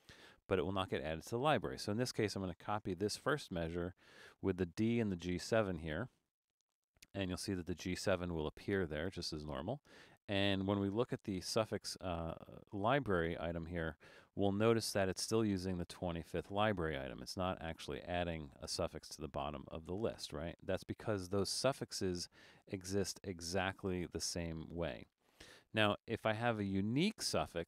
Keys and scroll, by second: 3.1 super+c, 6.8 super+v, 11.3 Return, 23.4 super+z.